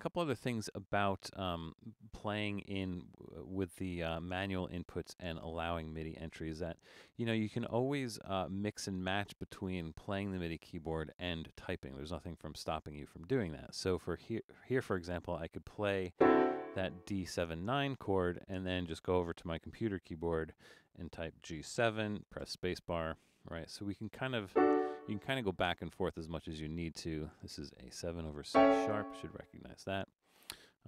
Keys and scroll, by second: 20.8-22.4 typing, 24.3 typing.